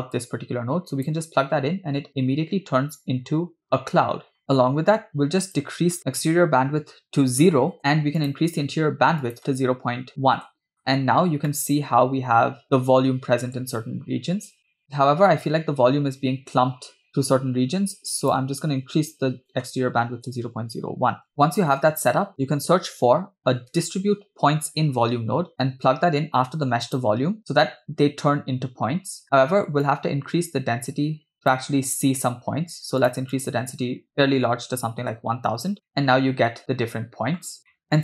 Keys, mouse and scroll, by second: 0.2-2.9 drag, 4.6 scroll down 2, 5.4-7.8 drag, 8.2-10.8 drag, 11.0 scroll up 3, 11.5-13.5 middle drag, 14.3 scroll down 2, 14.7-15.6 middle drag, 18.2-21.3 drag, 21.3 scroll down 1, 22.1 scroll down 2, 25.5 BackSpace, 29.3-29.8 scroll up 2, 29.9-31.6 drag, 33.0 click, 33.4-35.5 drag, 34.4 0, 35.9-37.5 middle drag, 37.7 middle click, 37.8 scroll down 4, 37.9 middle click.